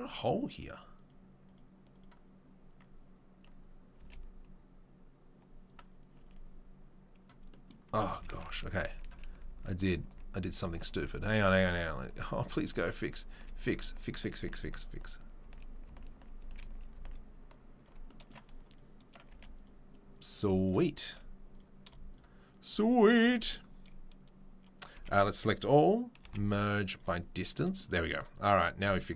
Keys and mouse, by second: 0.1 click, 0.2 middle click, 0.9 click, 1.1 middle click, 1.4 right click, 1.6-11.5 middle drag, 4.0 g, 4.8 click, 6.2 Tab, 8.2 ctrl+z, 8.4 ctrl+z, 8.9 ctrl+z, 9.1 ctrl+z, 9.4 ctrl+z, 9.6 ctrl+z, 9.8 ctrl+z, 10.0 ctrl+z, 10.4 ctrl+z, 10.7 ctrl+z, 11.2 ctrl+z, 11.5 ctrl+z, 11.7 ctrl+z, 12.1 ctrl+z, 12.4 ctrl+z, 12.9 ctrl+z, 13.4 ctrl+z, 13.7 ctrl+z, 13.9 ctrl+z, 14.5 ctrl+z, 15.0 ctrl+z, 15.5 ctrl+z, 16.4 ctrl+z, 16.6 ctrl+z, 16.6-18.6 middle drag, 17.8 ctrl+z, 18.6 click, 18.8 middle click, 19.3 3, 19.6 click, 20.2 shift+middle click, 21.0 click, 21.1-22.6 middle drag, 22.6 shift+click, 22.7 shift+middle click, 23.0 shift+click, 23.1-28.1 shift+middle drag, 24.9 a, 26.2 m, 28.1 click, 28.2-29.1 middle drag.